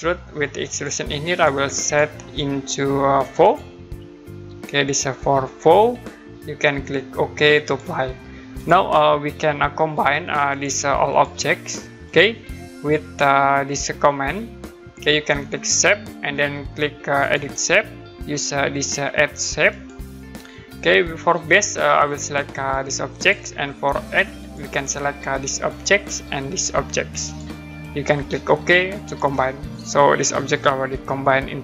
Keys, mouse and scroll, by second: 0.7 click, 3.4 click, 7.6 click, 9.2 click, 10.5 click, 17.2 click, 19.7 click, 23.1 click, 25.7 click, 27.2 click, 29.0 click.